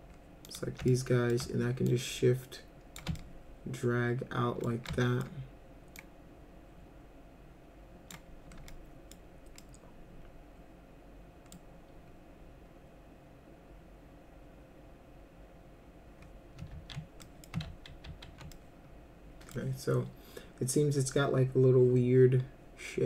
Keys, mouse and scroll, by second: 0.5 ctrl+click, 0.9 alt+middle click, 1.9-3.0 shift+drag, 3.2-4.6 alt+middle drag, 4.9 alt+middle click, 6.0-8.1 drag, 8.7 middle click, 9.6-11.5 middle drag, 16.7 ctrl+z, 17.2 middle click, 17.7 ctrl+z, 18.0 ctrl+z, 18.5-19.5 middle drag.